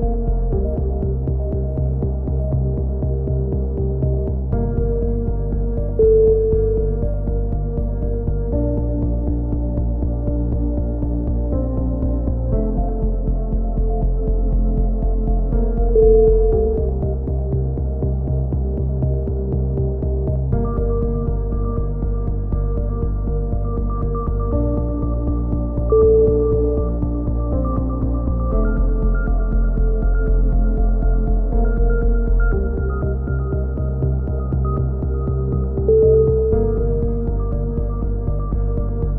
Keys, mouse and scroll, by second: 2.0 s, 3.2 z, 4.4 middle click, 5.0 a, 5.8 ctrl+KP_1, 7.9-9.4 middle drag, 10.1 right click, 10.7 ctrl+l, 11.2 ctrl+i, 11.9 h, 15.5-16.5 right drag, 16.7 click, 18.0-19.0 right drag, 19.1 ctrl+i, 19.6 x, 23.2 a, 24.9-25.9 drag, 27.7 e, 34.5 a, 34.9-36.5 drag, 36.5 middle click, 36.9 click, 37.6 ctrl+r.